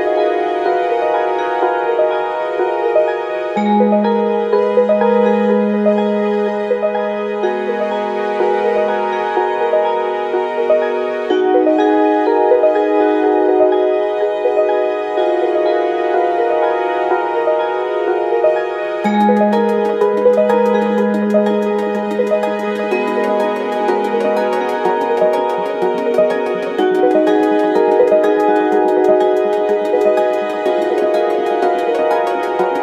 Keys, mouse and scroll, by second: 0.1 r, 10.1 n, 14.4 click, 20.9 Left, 24.2 Left, 26.9 Left, 28.5 Left, 29.0-32.8 drag.